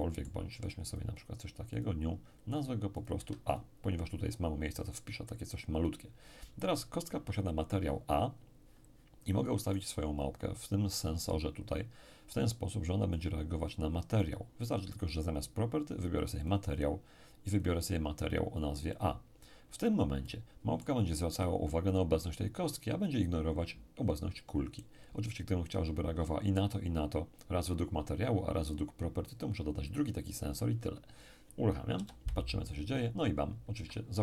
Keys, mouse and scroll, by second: 0.9-2.7 drag, 2.9-4.5 drag, 3.1 a, 9.6 right click, 13.1 click, 16.4 click, 17.5 click, 18.9 click, 20.2-22.6 middle drag, 31.9 p, 33.7 Escape.